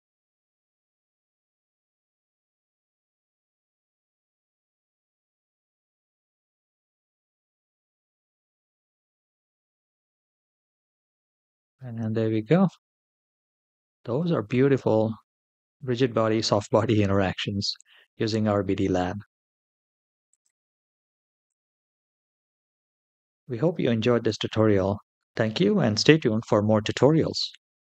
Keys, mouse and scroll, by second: 3.7 scroll up 1, 4.2-4.5 scroll up 1, 17.7 space, 20.1-21.5 drag.